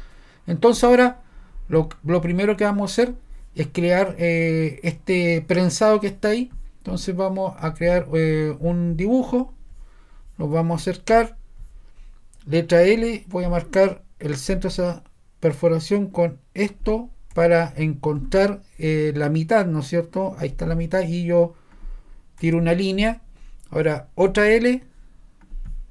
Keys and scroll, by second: 12.8 |, 17.4 ⟲, 22.5 ⟲.